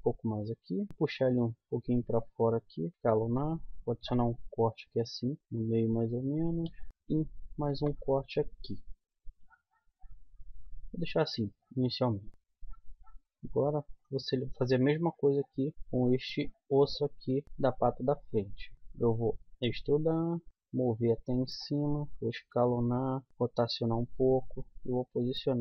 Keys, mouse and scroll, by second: 0.9 g, 2.7 s, 3.0-4.3 middle drag, 3.9 ctrl+r, 4.3 click, 6.8 z, 7.7 ctrl+r, 8.7 click, 10.5 Tab, 12.3 Tab, 12.8 Tab, 16.5 middle click, 17.5 KP_1, 18.1 z, 19.4 e, 20.5 g, 22.0 s, 23.3 r, 24.8 g.